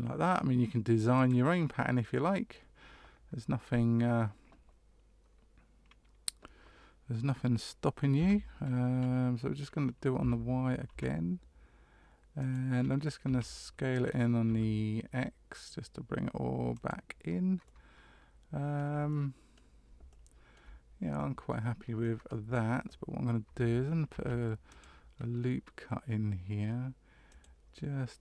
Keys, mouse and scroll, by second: 2.0 middle click, 8.1 e, 13.2 s, 17.6 middle click, 19.1 middle click, 20.1 shift+middle click, 21.1 middle click, 22.0 middle click, 24.1 ctrl+r.